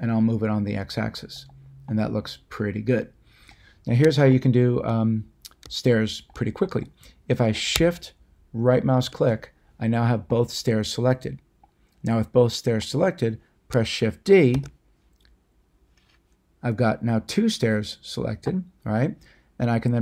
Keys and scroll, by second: 14.5 d.